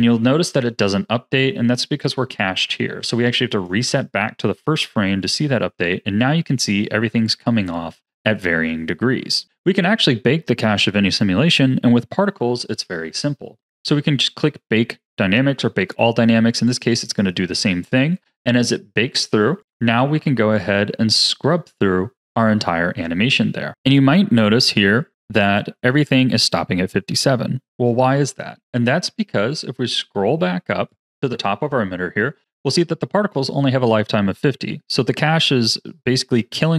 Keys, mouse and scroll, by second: 3.5-8.0 drag, 9.4 click, 16.6-19.5 drag, 19.5-23.3 drag, 24.9-27.8 drag, 29.4-30.1 scroll up 4, 30.8 click, 35.1-36.7 drag.